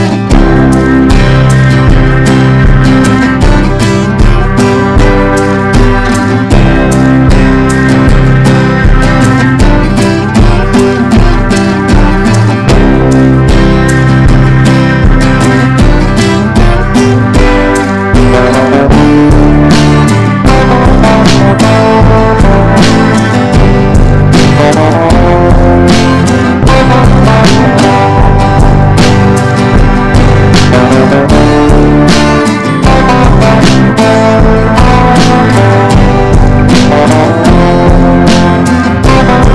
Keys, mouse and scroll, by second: 1.0 click, 1.6 Up, 1.8 Up, 2.6-6.8 drag, 7.4 shift+r, 9.1-16.3 drag, 16.5 Left, 16.6 Left, 16.7 Left, 17.1 Right, 17.8 ctrl+b, 18.8-23.3 drag, 24.0 Right, 24.2 Right, 24.4 Down, 25.4 click, 29.8 click, 30.3-35.2 typing, 35.9-39.5 drag.